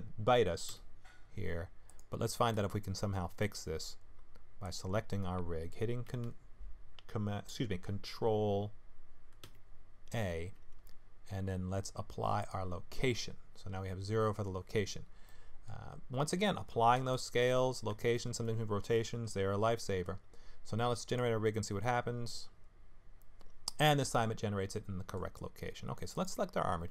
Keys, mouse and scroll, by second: 0.7 x, 2.9 shift+scroll down 1, 2.9 shift+middle click, 4.6 click, 9.4 ctrl+a, 15.2 middle click, 15.9-17.0 scroll up 4, 17.1 shift+middle click, 17.6-18.1 scroll up 3, 18.1 shift+middle click, 21.1 click, 24.1 middle click, 26.1 click.